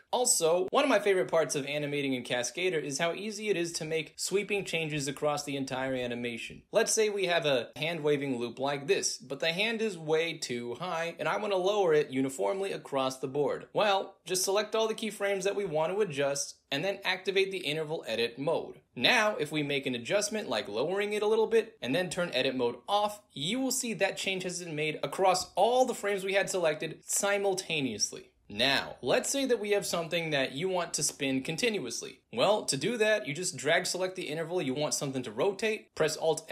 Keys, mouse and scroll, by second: 0.2-3.1 alt+drag, 4.0 alt+drag, 4.1 alt+right click, 4.3 alt+click, 7.4 alt+click, 8.1 alt+click, 9.5-10.3 drag, 10.7-11.5 drag, 12.0 click, 14.0 click, 17.7 click, 18.8 click, 19.4-20.0 drag, 21.7 click, 22.6 click, 23.2 click, 23.3 space, 26.7-29.7 alt+drag, 30.0-31.0 drag, 31.8 click, 33.5-35.4 drag.